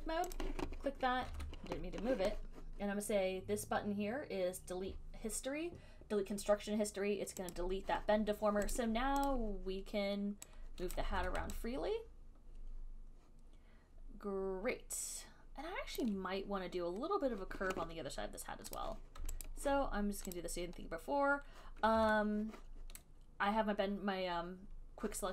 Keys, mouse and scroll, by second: 0.2 right click, 0.6 click, 1.5 ctrl+z, 6.5 click, 7.7 click, 9.0 click, 9.5 click, 11.1 click, 11.4 ctrl+z, 16.2 alt+click, 19.0 click, 19.6 alt+click, 20.6 click, 22.2 ctrl+z.